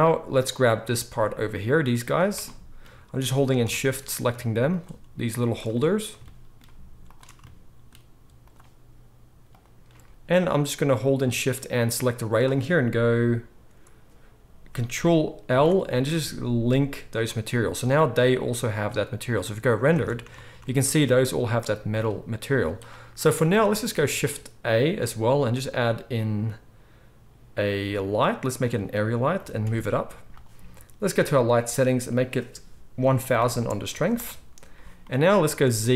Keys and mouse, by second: 0.6-3.3 middle drag, 3.3 shift+click, 3.4-4.6 shift+middle drag, 4.6 shift+click, 4.7-5.4 shift+middle drag, 5.4 shift+click, 5.5-8.4 shift+middle drag, 8.4 shift+click, 8.5-9.4 shift+middle drag, 9.4 shift+click, 9.5-11.2 shift+middle drag, 11.2 shift+click, 12.3-15.0 middle drag, 15.0 ctrl+click, 15.5 ctrl+l, 15.8-23.6 middle drag, 18.1 z, 20.0 alt+a, 22.4 z, 23.6 shift+drag, 23.9-32.0 shift+middle drag, 24.8 shift+a, 29.3 g, 32.0-35.9 drag, 33.3 0, 35.8 z.